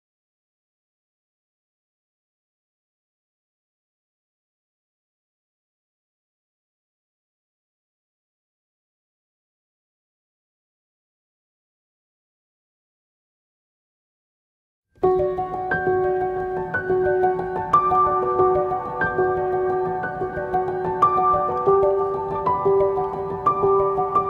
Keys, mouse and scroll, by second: 0.0 ctrl+v, 14.7 Return, 14.7-21.3 drag.